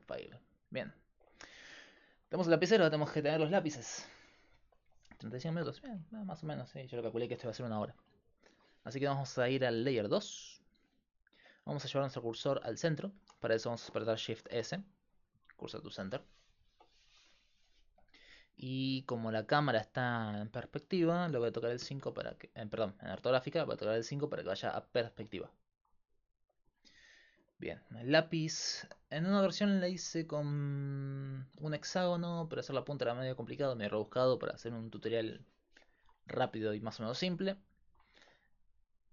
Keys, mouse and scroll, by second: 0.9 middle click, 14.4 shift+s, 21.8 KP_5.